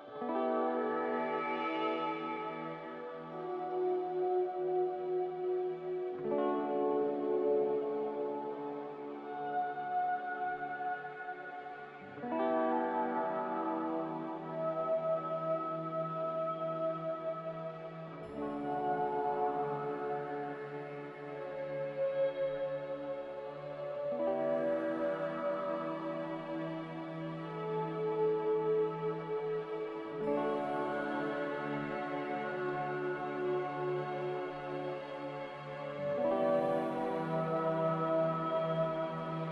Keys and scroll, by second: 20.1 z, 25.2 typing, 25.9 Return, 29.0 2, 29.0 0.